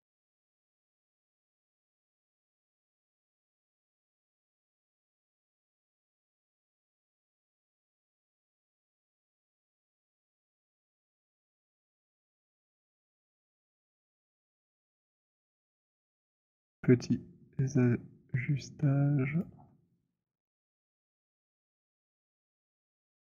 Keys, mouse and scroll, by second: 0.6 shift+click, 2.4 z, 5.0 shift+click, 7.2 shift+click, 11.5 click, 14.8 right click, 16.0 click, 19.3 click, 20.8 click.